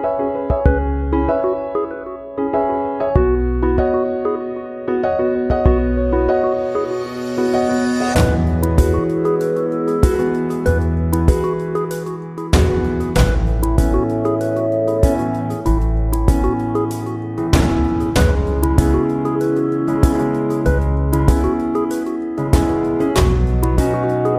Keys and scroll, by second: 5.2 ctrl+c, 5.4 ctrl+v, 22.1 Delete, 23.0 ctrl+z.